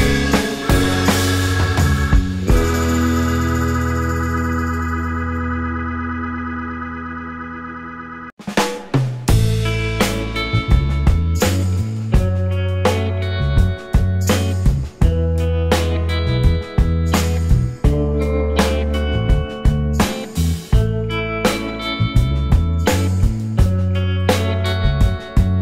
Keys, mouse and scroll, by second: 0.0-1.8 typing, 2.8-6.9 typing, 6.9 Return, 11.9 typing, 14.6 right click, 17.5 scroll down 1, 17.8 alt+click, 18.7 alt+click, 21.8 scroll, 22.0 scroll down 1, 22.1 alt+click, 24.8 double click.